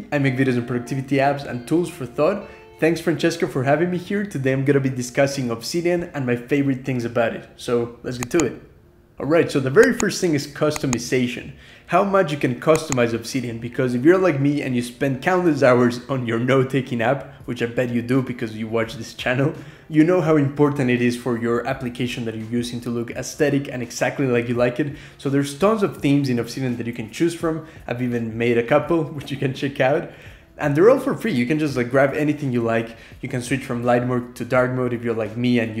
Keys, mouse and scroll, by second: 15.9 scroll up 1, 16.1 Return, 16.3 click, 16.5 j, 17.4 click, 17.6-19.0 typing, 18.7 click, 18.9 scroll up 2, 19.1 Escape, 19.5 ctrl+p, 19.7 scroll up 2, 20.5 click, 20.7 scroll down 2, 20.7 click, 21.0 \, 21.1 click, 21.3 ctrl+shift+h, 21.5 Escape, 21.7 j, 22.0 shift+k, 22.6 scroll up 2, 31.9-35.8 typing.